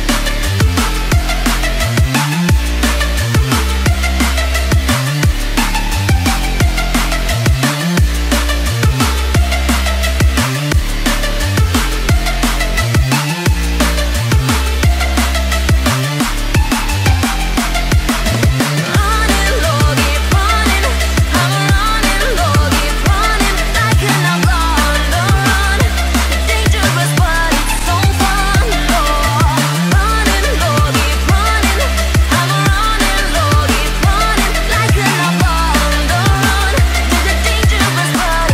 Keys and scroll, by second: 2.4 ctrl+g, 3.3 ctrl+a, 7.3 ctrl+d.